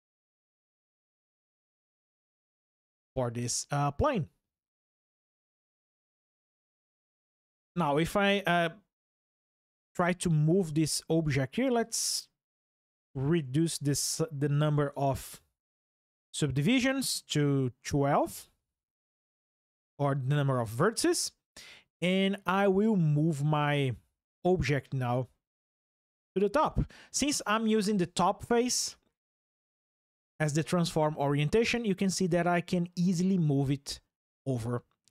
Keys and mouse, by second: 11.6-13.4 drag, 29.5-31.0 drag, 32.0 click, 34.2 click.